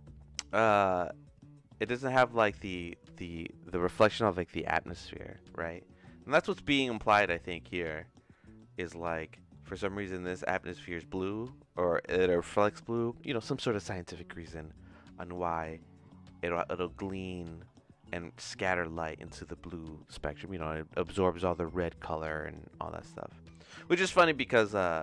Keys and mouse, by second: 6.3-7.5 drag, 7.8 middle click, 8.4 middle click, 9.4 middle click.